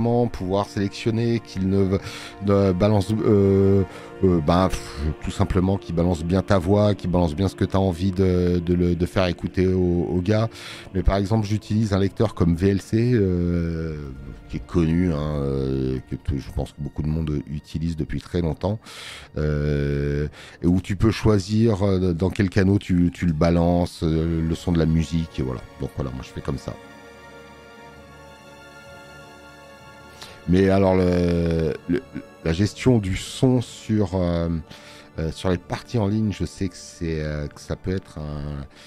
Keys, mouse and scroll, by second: 37.4 space, 37.6 click.